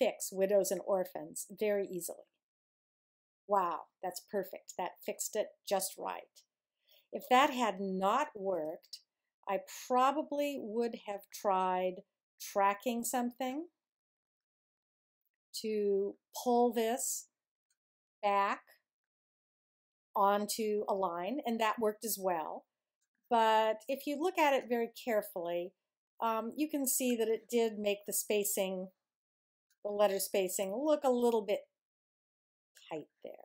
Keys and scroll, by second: 8.5 super+z.